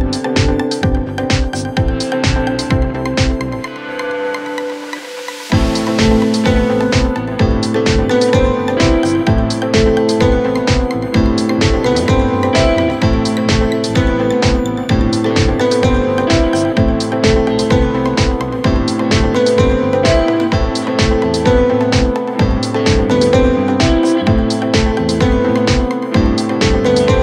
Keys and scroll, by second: 16.6 Escape, 17.2 Delete, 17.9 F3.